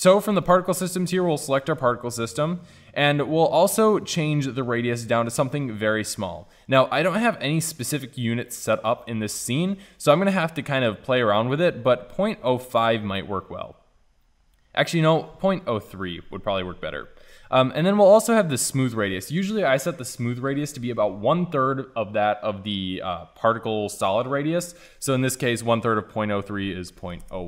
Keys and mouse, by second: 0.5-5.4 drag, 5.4-7.4 middle drag, 7.4 drag, 7.6-8.9 middle drag.